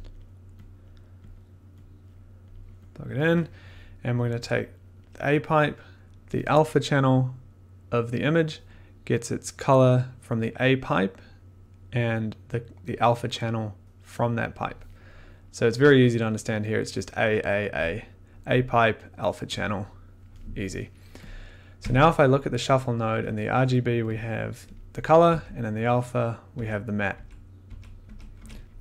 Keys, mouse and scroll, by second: 0.1 click, 0.8 click, 1.3 click, 2.4 click, 2.9 click, 9.8 click, 14.6 click, 21.3 click, 21.8 1, 23.5 middle click, 24.1 click, 24.2 middle click, 25.2 a, 26.5-28.3 typing.